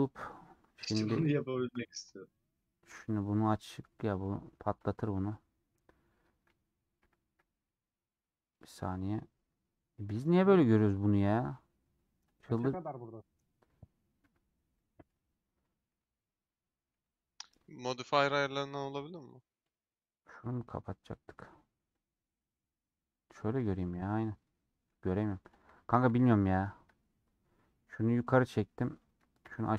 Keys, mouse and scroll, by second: 3.5 click, 3.9 middle click, 4.2-4.7 scroll up 2, 4.7 3, 5.1-5.4 scroll up 2, 5.4 middle click, 6.4 alt+z, 6.8 alt+z, 7.6-14.3 middle drag, 14.3 Tab, 14.7 middle click, 15.1 Tab, 15.6 middle click, 16.0 Tab, 16.4 middle click, 17.0 Tab, 17.4-20.4 middle drag, 20.4-23.3 drag, 23.3 middle click, 23.7 scroll up 1, 23.9 scroll down 2, 24.1 middle click, 24.9 2.